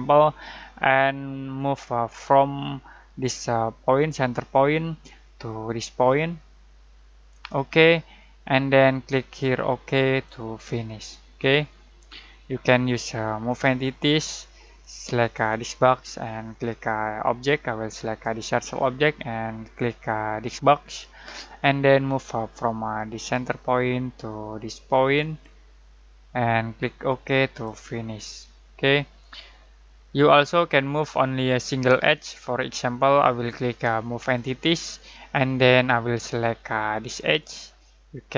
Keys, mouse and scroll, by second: 3.9 click, 7.3 click, 10.2-10.8 drag, 23.1 click, 27.3-27.7 drag, 34.1 click, 37.1 click.